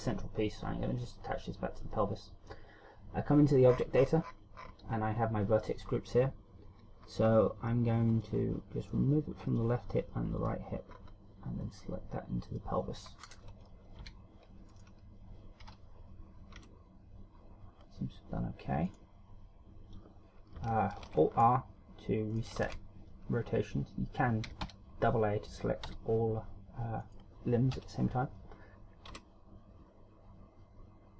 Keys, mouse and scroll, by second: 2.1 click, 4.0-4.9 scroll up 20, 7.1-8.1 scroll down 3, 9.1 click, 9.7 click, 10.6 click, 11.2-11.7 scroll up 3, 11.9 click, 12.8 click, 13.2 scroll down 4, 14.2 Tab, 15.0 right click, 15.9 z, 16.8 r, 19.2 right click, 21.3 alt+r, 22.6 right click, 22.9 alt+r, 24.7 a, 24.9 a, 26.2 a, 27.3 right click, 28.0 KP_3, 29.4 r.